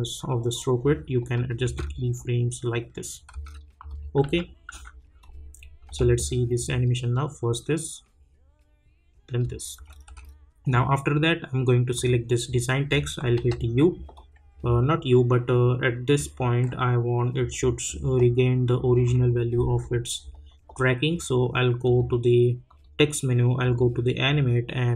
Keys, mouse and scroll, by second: 1.6 space, 3.9 click, 4.2 u, 4.7 u, 5.2-6.8 drag, 6.8 space, 9.4 space, 11.9 click, 13.3 u, 14.1-21.8 drag.